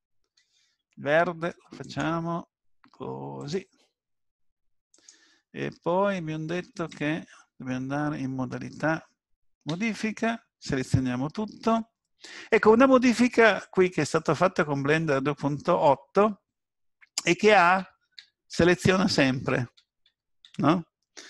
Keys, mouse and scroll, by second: 1.8 click, 7.0 Tab, 9.7 a, 17.8-20.4 typing.